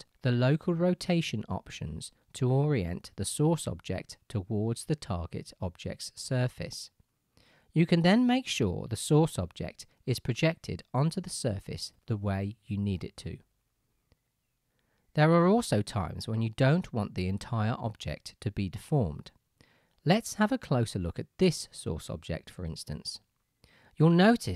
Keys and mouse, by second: 4.8-13.8 drag, 4.8-13.8 right drag.